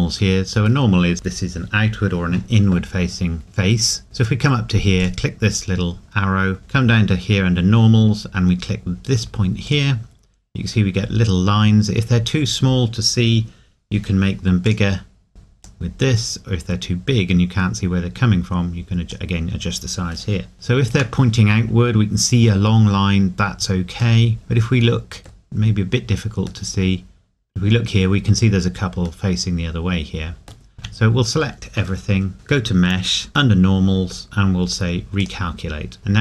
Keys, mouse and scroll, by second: 5.0 click, 9.6 click, 11.1 scroll down 1, 14.6 click, 20.6 shift+middle click, 24.2 middle click, 25.6 scroll up 1, 26.7 middle click, 30.8 a, 35.2 click, 36.0 scroll down 1, 36.0 middle click.